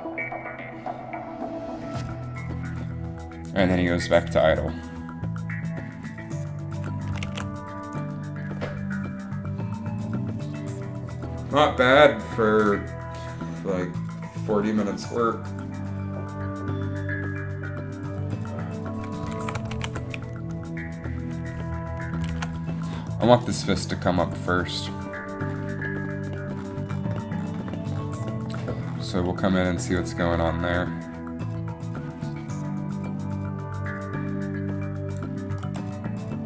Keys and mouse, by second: 7.4 alt+a, 19.6 shift+Left, 19.8 alt+a, 22.5 alt+a, 30.1-32.1 drag.